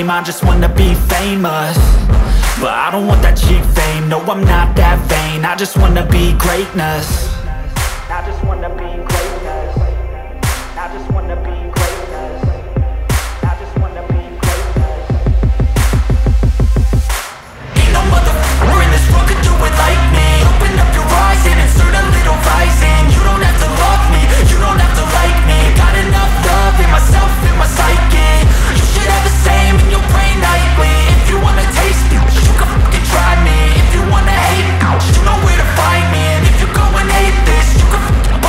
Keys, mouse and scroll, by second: 3.4 click, 4.8 right click, 6.3 right click, 9.0 click, 11.0-12.4 scroll, 15.8 middle click, 19.4 click, 20.9 scroll, 22.7 click, 23.1 scroll, 24.8 click, 26.1-29.2 drag, 30.1 click, 32.2 click, 33.6 click, 35.0-36.8 typing.